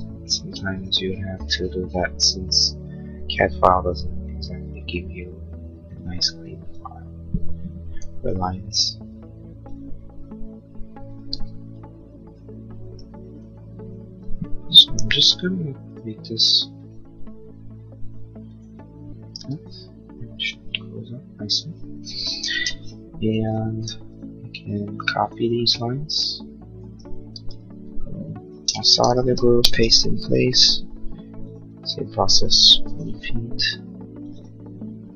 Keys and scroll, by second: 5.6 e, 7.9 l, 11.3 e, 14.9 l, 19.3 e, 22.4 space, 27.2 ctrl+c, 28.4 space, 28.6 Escape, 31.0 p, 32.6 1, 32.9 Return.